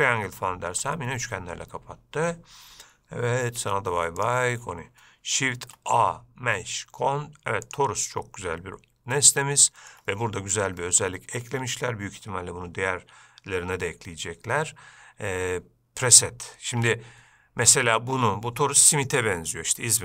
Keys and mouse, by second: 0.6-1.0 middle drag, 3.8 x, 5.8 shift+a, 9.4-10.2 shift+middle drag.